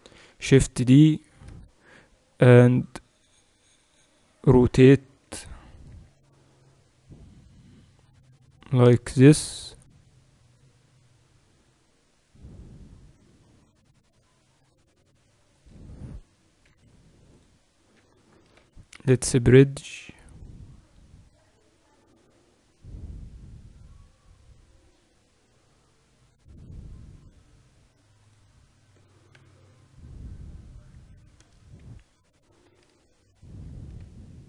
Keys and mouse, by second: 0.3 shift+d, 2.8-6.0 drag, 6.0 r, 16.8 c, 18.7 w, 31.6 a, 32.8 b.